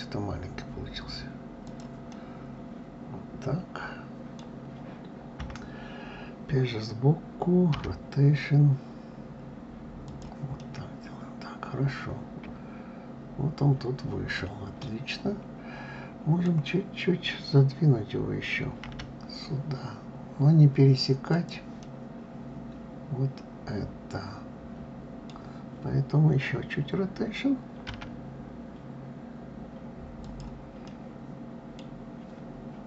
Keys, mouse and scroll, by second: 2.1-5.1 middle drag, 5.4 KP_3, 7.7 r, 10.6-13.7 middle drag, 21.8-24.9 middle drag, 30.8-32.8 middle drag.